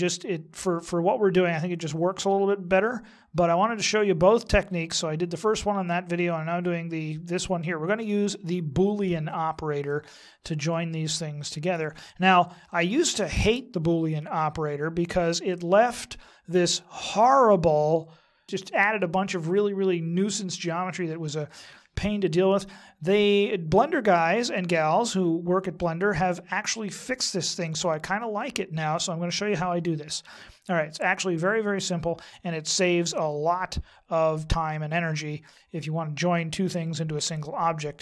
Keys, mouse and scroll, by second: 9.9 middle click, 11.2-12.1 scroll up 2, 12.7 shift+middle click, 22.7 middle click, 26.5 middle click, 36.5 middle click.